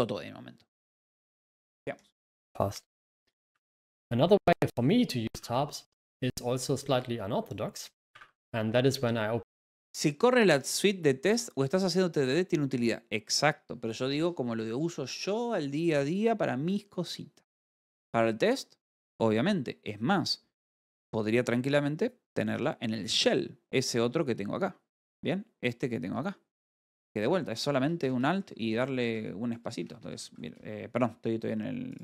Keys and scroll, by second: 28.5 l, 29.1 Escape, 30.1-31.2 typing.